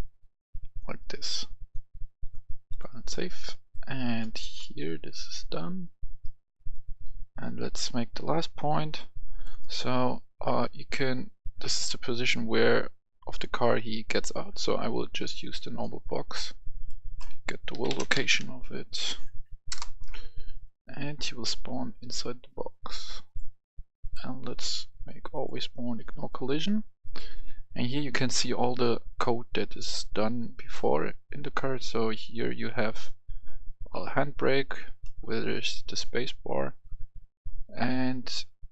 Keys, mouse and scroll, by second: 3.5 right click, 4.8 click, 6.2 right click, 7.0 scroll down 1, 7.2 right click, 11.4-16.5 drag, 17.6-18.4 typing, 19.1 Up, 19.3 Up, 19.5 Up, 19.7 Return, 22.1-23.5 drag, 26.1 right click, 26.4 scroll down 1, 27.0 right click, 31.6 scroll up 1, 32.8 right click, 37.0 scroll down 1, 37.5-38.7 right drag.